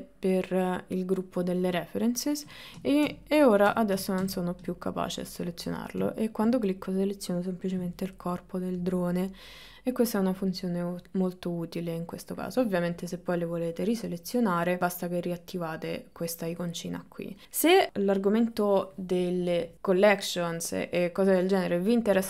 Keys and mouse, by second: 4.7 click.